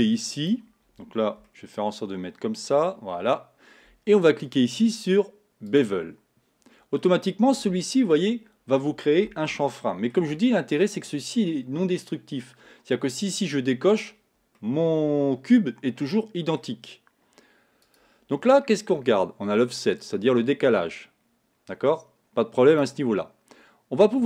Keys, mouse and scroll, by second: 0.0-1.5 drag, 1.5-4.5 shift+middle drag, 4.5-7.0 drag, 7.0-8.4 middle drag, 8.4 scroll up 2, 9.6-12.6 shift+middle drag, 13.9 click, 14.6-17.6 middle drag, 17.8 click, 20.0-23.0 drag.